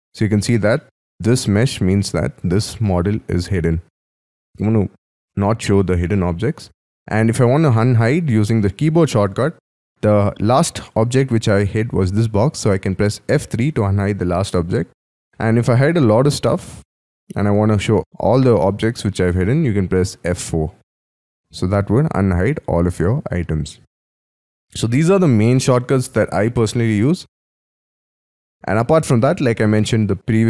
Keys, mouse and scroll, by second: 0.7 middle click, 6.6-9.7 scroll down 6, 13.3 F3, 14.5-15.0 scroll down 6, 15.0 middle click, 15.5-16.3 scroll down 6, 16.9 scroll down 1, 17.0 F2, 20.2 F4, 23.4 scroll down 5, 23.9 scroll up 5, 24.1 Escape, 24.8 middle click.